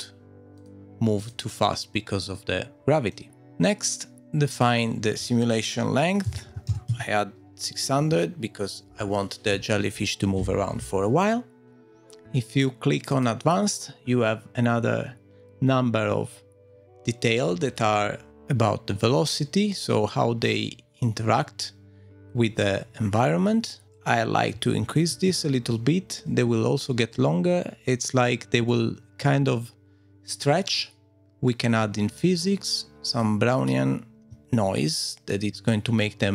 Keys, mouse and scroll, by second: 0.6 click, 1.7 click, 2.7 click, 3.1 click, 3.4-4.2 scroll up 10, 4.5 click, 11.7 click, 23.8 click, 26.1-27.1 scroll down 4, 27.1 middle click, 28.7 middle click, 31.2-33.1 scroll down 5, 33.1 click, 35.2 middle click, 35.6 click.